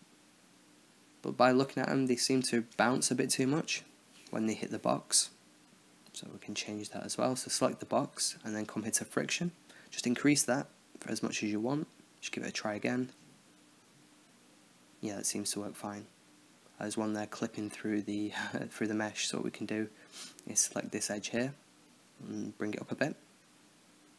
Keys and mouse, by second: 0.7 middle click, 4.4-5.0 drag, 5.0-5.9 middle drag, 5.9-6.5 drag, 6.5-7.7 middle drag, 7.7-10.5 drag, 11.4 click, 12.1 alt+a, 17.8 click, 18.6-19.6 middle drag, 19.9 Tab, 22.3-23.4 drag.